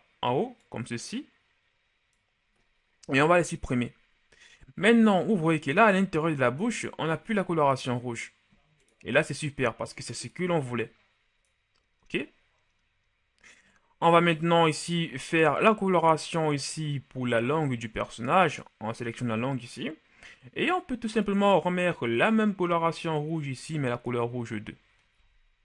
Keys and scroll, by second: 3.7 Delete, 25.5 a.